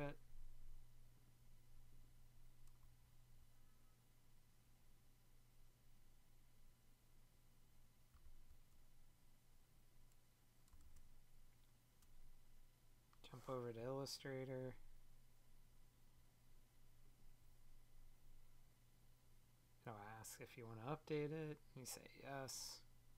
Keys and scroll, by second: 10.7 super+Tab.